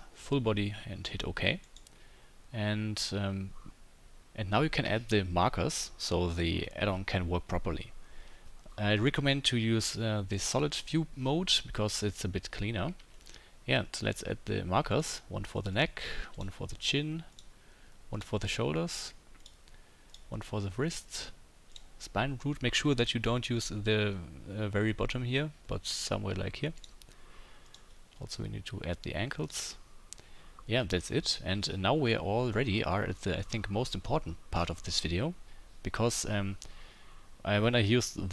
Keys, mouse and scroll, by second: 10.6-15.0 middle drag, 15.0-15.8 drag, 15.8-16.3 middle drag, 16.3-17.4 drag, 17.4 middle click, 18.1-19.5 drag, 19.5-20.1 middle drag, 20.1-21.2 drag, 21.2-21.7 middle drag, 21.7-26.8 drag, 26.8-27.7 middle drag, 27.7-29.5 drag, 29.5-38.3 middle drag.